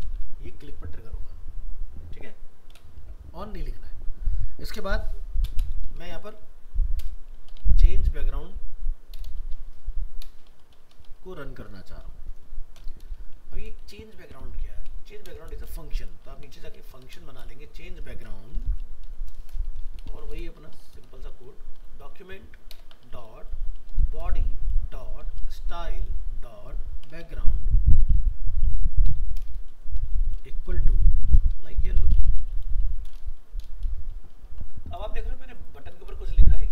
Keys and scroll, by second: 13.8 ctrl+shift+Left, 14.2 ctrl+c, 17.4 ctrl+v, 34.1 ctrl+s.